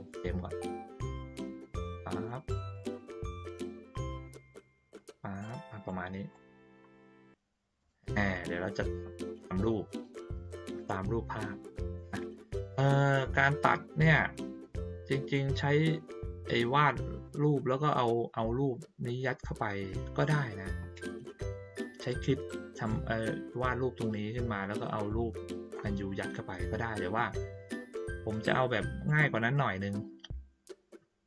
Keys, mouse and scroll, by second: 1.0-2.2 drag, 2.7-5.8 drag, 6.3 middle click, 7.1 ctrl+middle click, 7.8 middle click, 29.0 click.